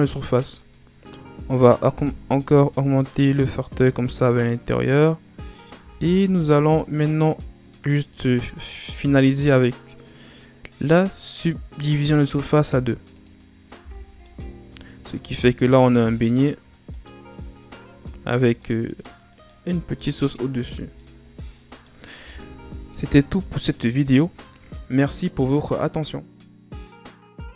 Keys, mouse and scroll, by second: 1.4-4.1 drag, 4.1-5.6 middle drag, 5.6 Tab, 6.1 Tab, 6.5 right click, 7.9-11.7 drag, 13.0 click, 13.7 a, 13.9 scroll down 2, 14.2-15.3 middle drag, 15.3 scroll down 2, 15.6 middle click, 16.4-16.8 scroll up 1, 16.8 right click, 17.9 a, 18.5 middle click, 19.2 right click, 19.6 scroll down 1, 19.9 middle click, 20.5 a, 20.9-23.9 middle drag, 23.9 click.